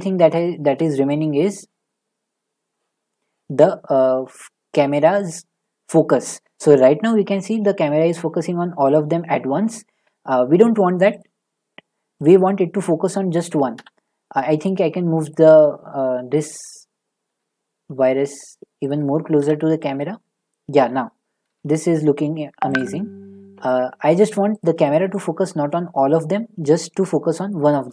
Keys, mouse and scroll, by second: 4.2 z, 5.2 click, 11.2 click, 12.2 click, 13.7 0, 14.6 middle click, 14.6 middle click, 15.3 click, 16.1 middle click, 16.2 middle click, 16.2 middle click, 17.3 g, 18.9 click, 19.4 0, 19.6 click, 21.5 g, 22.8 click, 24.6 click.